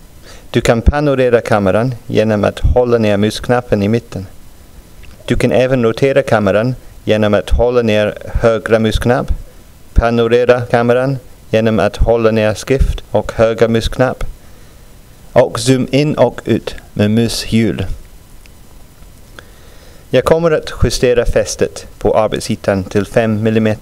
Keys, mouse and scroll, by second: 16.4-16.8 scroll down 2, 17.4-17.8 scroll up 2, 17.9 scroll up 2, 19.3 click, 23.4 click.